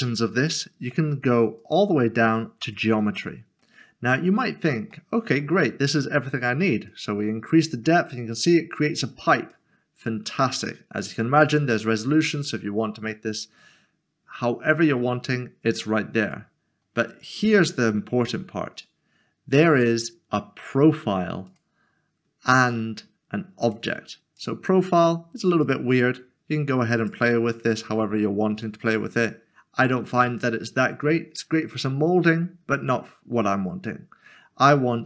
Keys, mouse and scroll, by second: 0.4 click, 4.1 scroll up 1, 4.9 middle click, 6.9 click, 11.8 click, 19.6 click, 23.6 click, 25.0 scroll down 1, 25.6 click, 31.1 scroll down 1, 31.7 middle click.